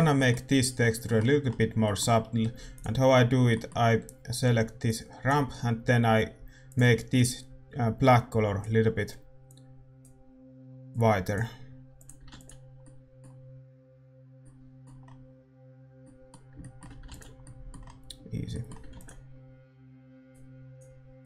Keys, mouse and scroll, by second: 13.7 ctrl+s, 13.7-21.2 middle drag, 20.3 ctrl+s.